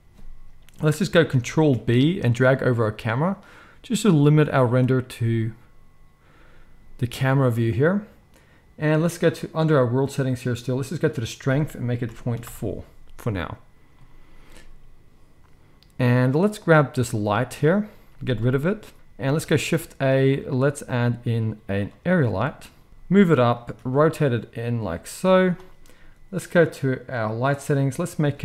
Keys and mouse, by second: 1.6 ctrl+b, 9.4-11.1 middle drag, 11.1-16.3 drag, 16.3-18.2 middle drag, 17.9 x, 18.2-18.9 drag, 18.7 z, 18.9 shift+middle click, 18.9 x, 19.1 shift+a, 22.9 g, 23.7 r, 24.1-26.4 middle drag, 24.7 g, 26.4 click, 26.5-27.7 middle drag, 27.7-28.4 drag.